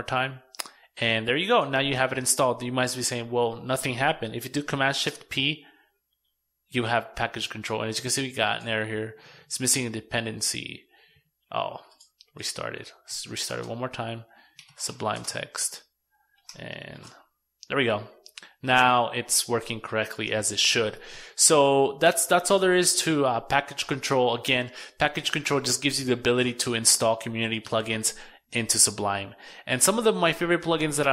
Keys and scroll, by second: 3.7 shift+super+p, 11.3 super+q, 15.6 shift+super+p.